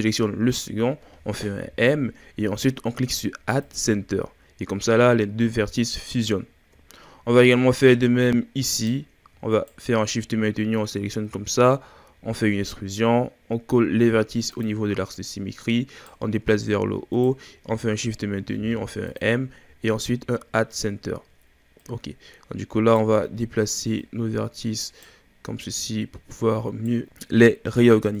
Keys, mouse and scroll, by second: 0.5 shift+right click, 1.6 m, 4.8-6.4 scroll down 4, 6.4-7.5 shift+scroll down 8, 7.5-8.7 scroll up 6, 8.7 right click, 9.5 shift+right click, 11.3 e, 15.1 right click, 16.4-17.2 scroll up 2, 17.2 shift+right click, 18.5 m, 19.7-20.9 scroll down 8, 20.9-21.8 scroll up 1, 21.8 right click, 24.0 right click, 25.6 right click, 27.0-28.2 scroll up 1.